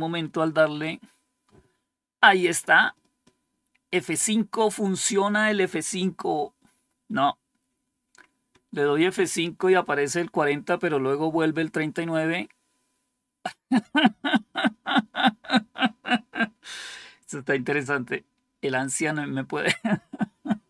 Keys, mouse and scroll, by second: 0.4 F5, 8.4 F5, 17.7 F5.